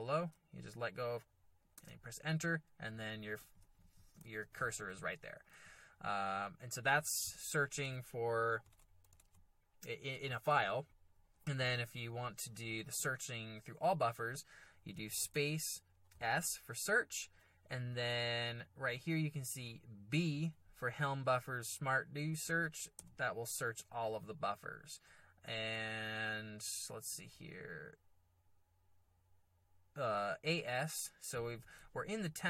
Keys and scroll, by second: 1.8 Return, 2.6-5.4 typing, 8.0 alt+Tab, 8.8 alt+Tab, 9.2 alt+Tab, 10.1 alt+Tab, 11.8 alt+Tab, 15.2 space, 16.1 s, 23.0 b, 27.1 a.